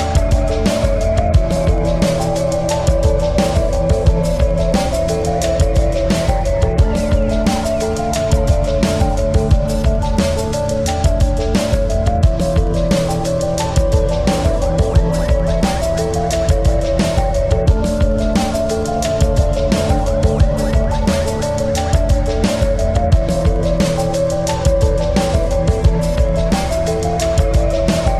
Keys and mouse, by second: 1.1 click, 2.6 click, 3.8 click, 5.0 click, 9.4 ctrl+c, 10.1 ctrl+f, 11.2-13.7 alt+shift+drag, 13.7 right click, 15.8 click, 19.0 click, 20.2 click, 20.3 click, 22.6 click, 25.1 click.